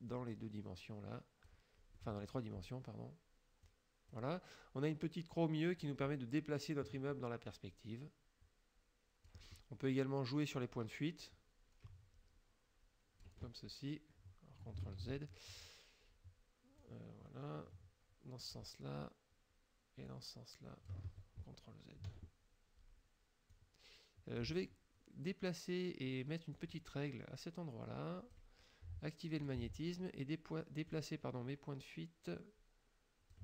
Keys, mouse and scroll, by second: 0.1-1.7 drag, 2.0 middle click, 3.7 click, 5.9-9.5 drag, 10.6-13.5 drag, 15.0 ctrl+z, 16.8-18.8 drag, 20.1 click, 21.1 ctrl+z, 23.6 click, 26.6-28.6 drag, 29.5 click, 30.9-33.4 drag.